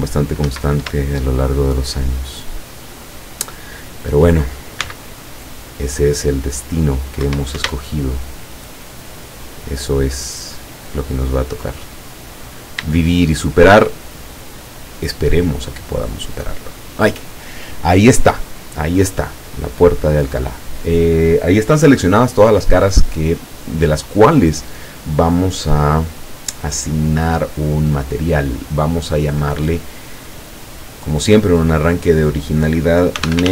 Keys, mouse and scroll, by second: 0.5 Escape, 1.3 shift+middle click, 2.4 shift+middle click, 3.7 shift+middle click, 4.9 c, 5.6-7.4 drag, 7.3 Escape, 7.6 Caps_Lock, 8.1 shift+middle click, 9.5 shift+right click, 9.9 shift+right click, 10.7 shift+right click, 11.3 shift+right click, 11.8-12.5 shift+scroll down 1, 13.1-14.0 shift+middle drag, 14.1-15.6 shift+middle drag, 15.9-16.3 scroll up 2, 16.9 scroll down 2, 18.6 scroll down 2, 19.4-23.9 middle drag, 25.5 click, 26.8-27.3 scroll up 1, 28.1 click, 29.9 click, 30.9 click, 33.2-33.5 typing.